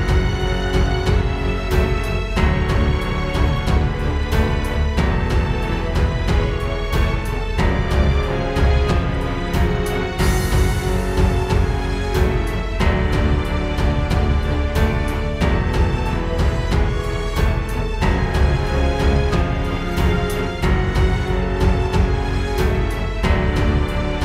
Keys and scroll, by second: 18.5 space, 19.1 alt+super+space, 19.6 super+space, 20.3 super+space, 20.8 super+space, 21.0 super+space.